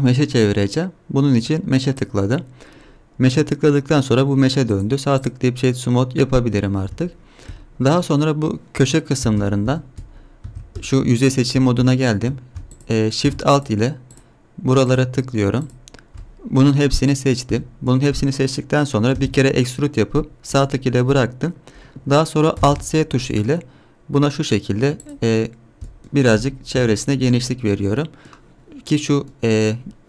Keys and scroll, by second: 9.3 Tab, 10.5 3, 19.1 e, 22.6 alt+s, 26.7 KP_Decimal.